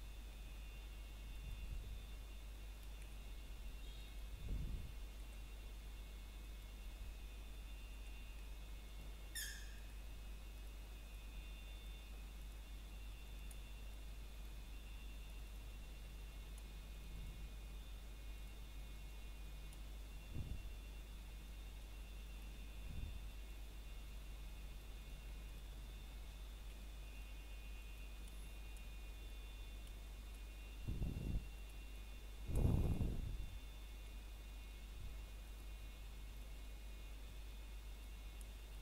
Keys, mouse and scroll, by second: 0.1 shift+middle click, 0.6 scroll up 1, 4.4 click, 10.5 scroll down 1, 11.0 shift+middle click, 12.7 click, 16.1 scroll down 1, 16.3 shift+middle click, 16.5 scroll up 1, 17.9 e, 19.1 click, 19.2 scroll down 2, 19.5 shift+middle click, 19.7 scroll up 1, 20.1 middle click, 20.6 scroll up 1, 21.6 middle click, 22.2-24.1 scroll up 1, 24.7 middle click, 29.7 scroll up 1, 31.3 e, 32.5 click, 34.4 e, 35.5 click, 36.8 s, 38.2 click, 38.5 scroll up 1.